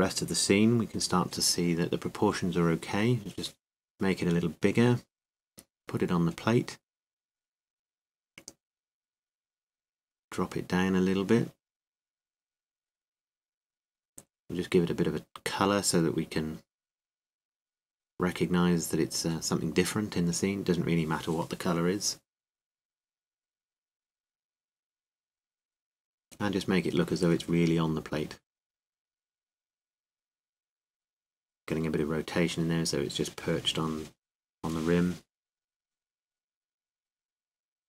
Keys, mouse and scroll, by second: 3.7 s, 5.2 KP_7, 6.3 g, 28.5 r, 29.1-30.8 drag, 31.6 r, 33.4-35.6 drag.